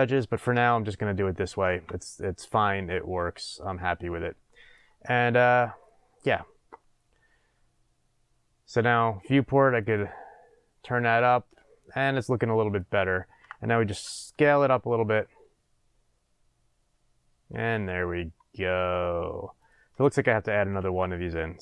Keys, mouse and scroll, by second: 0.0-9.8 middle drag, 0.0 scroll up 1, 1.7 Tab, 9.8 click, 11.3-12.2 middle drag, 13.9 s, 19.7 click, 20.7 Tab.